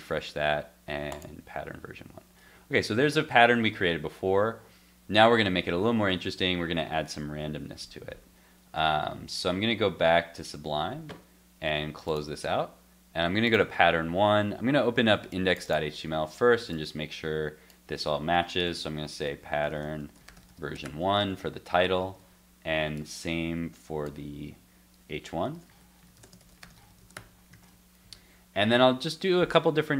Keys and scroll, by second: 8.8 super+Tab, 21.2 super+s, 22.0 super+s, 27.5 super+s.